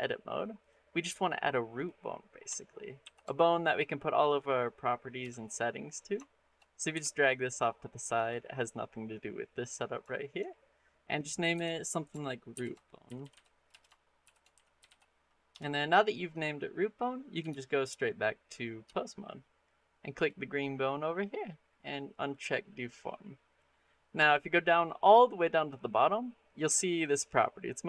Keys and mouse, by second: 1.2 middle click, 1.6 click, 1.9 middle click, 2.8 shift+a, 5.0 KP_3, 6.1 shift+middle click, 6.8 g, 10.0 shift+middle click, 11.4 F2, 13.0 o, 17.3 ctrl+Tab, 20.0 click, 22.1 click.